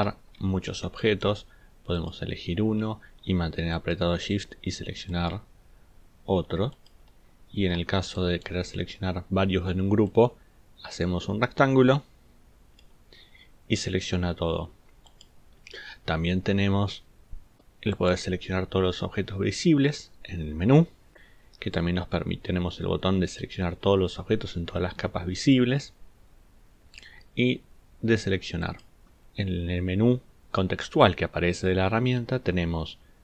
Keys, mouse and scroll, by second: 0.1 ctrl+scroll down 2, 3.8 shift+click, 5.1 shift+click, 6.7 shift+click, 7.5 ctrl+scroll down 2, 8.1 ctrl+click, 8.5 middle click.